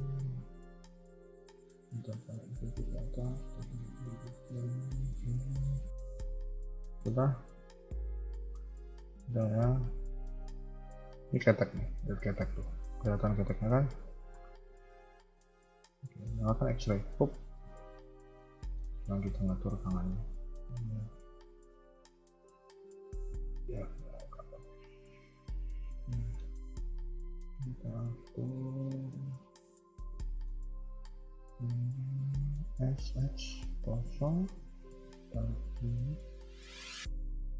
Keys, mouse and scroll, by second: 5.3 g, 5.3-6.0 scroll down 1, 6.0-6.7 scroll down 1, 6.8 shift+middle click, 7.2 scroll up 2, 7.8 a, 8.0 a, 8.2 middle click, 10.2 KP_1, 10.6-11.2 scroll down 2, 13.8-14.7 scroll down 2, 16.9 click, 17.5 b, 18.5 shift+middle click, 19.3 g, 23.1 r, 25.8 scroll up 1, 26.1 shift+middle click, 26.4-26.8 scroll up 1, 27.2 alt+click, 27.2 scroll up 1, 29.7 middle click, 30.6 KP_1, 31.5 alt+click, 32.7 s, 34.6 g, 37.0 alt+click.